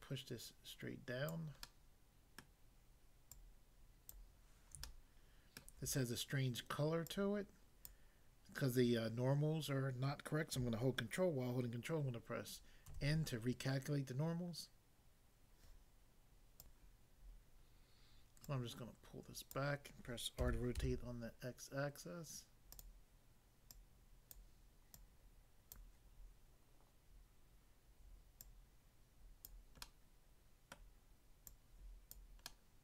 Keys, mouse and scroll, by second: 1.3 click, 1.7 middle click, 2.4 middle click, 3.4 click, 4.2 click, 4.8 shift+middle click, 7.1 click, 7.9 click, 12.9 ctrl+n, 16.6 click, 18.4 click, 19.6 click, 20.4-20.7 typing, 22.7 click, 22.8 click, 23.7 click, 24.4 click, 24.9 click, 25.8 click, 28.4 click, 29.5 click, 29.8 middle click, 30.8 middle click, 31.5 click, 32.1 click, 32.4 middle click.